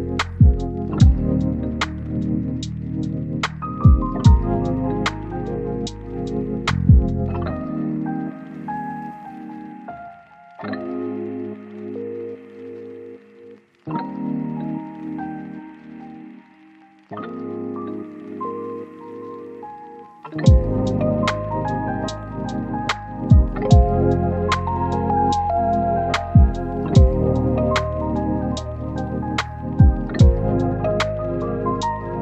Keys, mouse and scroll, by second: 1.1 right click, 1.8 click, 2.9 right click, 3.1 scroll up 1, 3.4 click, 4.5 scroll down 1, 4.8-5.6 scroll up 1, 5.6 click, 6.7 scroll down 1, 6.8 scroll up 1, 7.0 click, 8.3 scroll down 1, 8.5 scroll up 1, 9.2 click, 9.4 right click, 10.1 scroll up 1, 10.2 right click, 10.9 click, 11.5 scroll up 1, 11.7 right click, 11.9 click, 12.1-12.6 scroll up 2, 12.2 right click, 12.6 right click, 12.8 scroll down 1, 13.0 right click, 13.4 scroll up 1, 13.5 right click, 16.0 click, 18.3 right click, 19.7 click, 20.6 right click, 21.2 click, 21.4-29.0 right drag, 29.0-29.9 scroll up 1, 29.9 click, 31.4 scroll down 1, 31.5-31.9 scroll up 1, 31.9-32.2 drag.